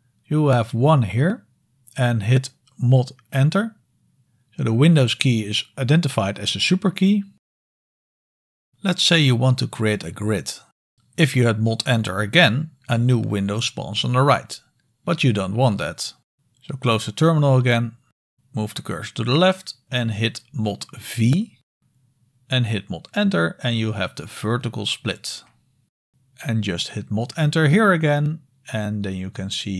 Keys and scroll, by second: 3.8 typing, 11.0 super+Return, 14.2 ctrl+d, 20.5 super+v, 22.8 super+Return, 29.6 super+Return.